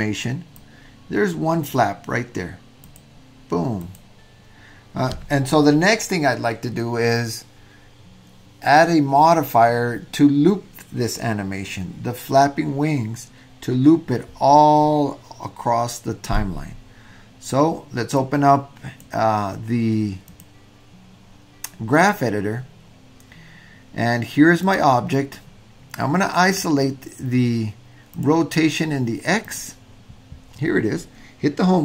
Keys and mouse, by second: 0.7-1.7 drag, 2.9 click, 3.8 click, 18.3 click, 18.6 click, 20.3 click, 21.9 click, 24.6 click, 26.5-26.8 drag, 28.1 click, 29.5 click.